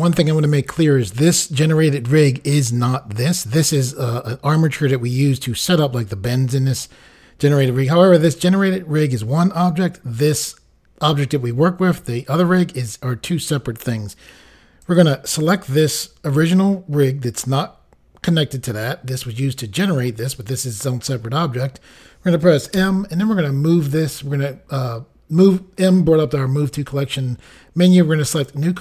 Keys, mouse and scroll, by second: 14.8 click, 15.0 click, 28.3 click.